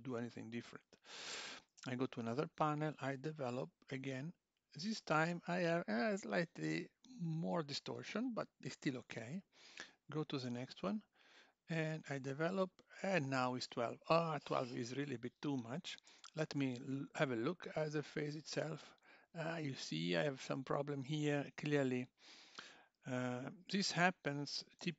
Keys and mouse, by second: 1.8 l, 3.6 click, 9.6 click, 10.4 l, 11.9 click, 16.1 Tab, 16.4 click, 17.2 g, 21.6 click, 23.4 x.